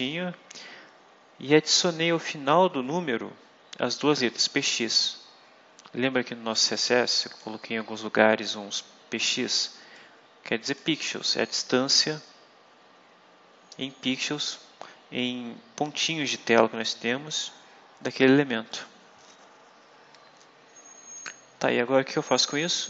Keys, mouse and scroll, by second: 4.1 click, 6.5 click, 7.6-8.4 scroll down 3, 9.8 click, 17.3-18.4 drag, 18.6 click, 19.6-20.0 scroll down 2, 22.4-22.8 scroll down 2.